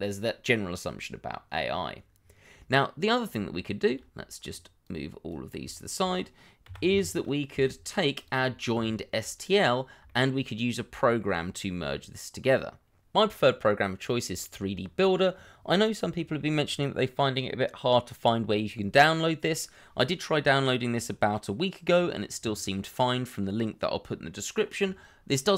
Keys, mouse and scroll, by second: 2.1-3.3 scroll down 1, 4.5-5.1 scroll down 1, 6.4 shift+middle click, 6.6 g, 6.8 y, 7.5 x, 8.9 shift+middle click, 9.7 scroll up 1, 10.0 shift+middle click, 10.9 shift+middle click, 11.4-12.4 scroll up 1.